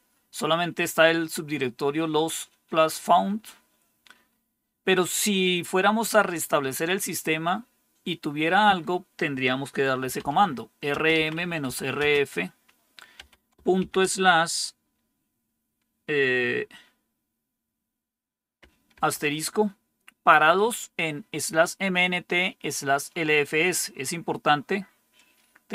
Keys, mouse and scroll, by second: 9.7-12.0 typing, 13.1-13.7 typing, 18.9 shift+8.